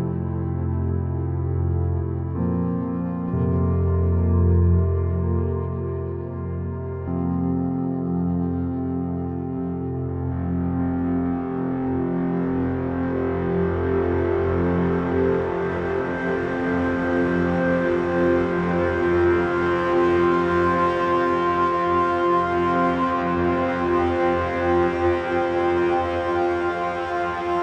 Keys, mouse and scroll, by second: 7.6 shift+z, 9.4-11.4 middle drag, 12.4-14.3 middle drag, 17.7-19.5 drag, 20.0-22.0 drag, 23.4-25.2 drag, 26.4-27.6 drag.